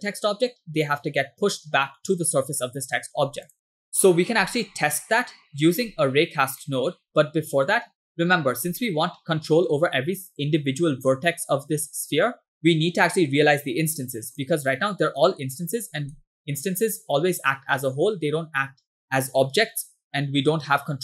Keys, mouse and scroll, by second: 3.5 click, 3.7-4.5 middle drag, 5.8-6.2 scroll down 2, 6.7 middle click, 7.1 scroll up 3, 8.2-8.7 scroll up 2, 8.9-9.7 shift+middle drag, 12.6-12.9 scroll down 3, 13.1 scroll up 3, 13.6-13.9 scroll down 1, 14.0-14.3 scroll up 1, 14.4 click, 15.6 middle click, 16.2-17.4 middle drag, 18.5-19.0 scroll up 2.